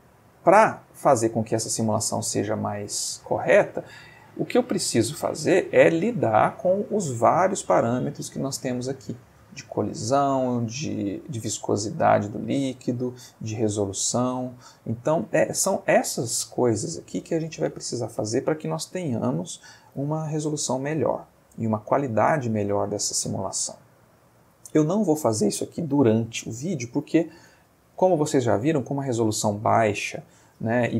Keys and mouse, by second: 1.4-2.3 middle drag, 2.4-3.0 shift+middle drag, 3.0-3.8 shift+middle drag, 6.5 click, 7.5 click, 8.5-9.2 middle drag, 10.6 middle click, 12.6 middle click.